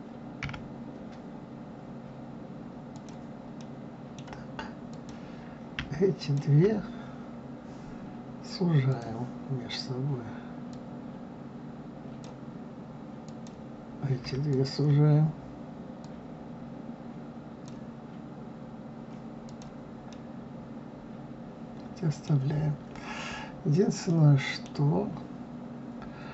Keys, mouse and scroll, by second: 3.6-4.9 middle drag, 4.9 click, 6.2 shift+click, 8.9-10.9 drag, 13.2 click, 14.5 shift+click, 16.0 click, 19.5 click, 20.1-22.7 middle drag, 22.7-23.5 scroll up 2, 23.5-24.1 scroll down 2, 24.1-25.5 middle drag, 25.5 scroll up 1.